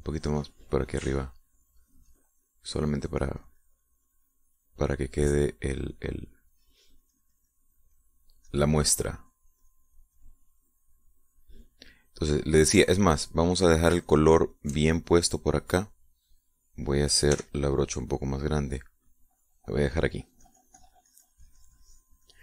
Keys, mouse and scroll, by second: 9.4-12.0 drag, 14.0 shift+click, 15.0 shift+click, 18.3 f, 19.0 click, 19.7-22.4 drag.